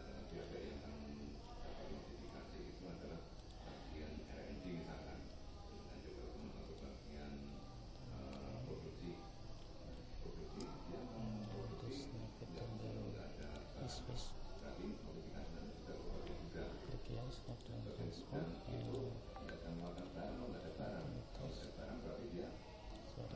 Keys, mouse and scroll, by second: 1.5-3.4 middle drag, 3.4 click, 6.7 click, 9.5-13.4 middle drag, 13.4 right click, 17.5-20.5 drag, 21.6 click.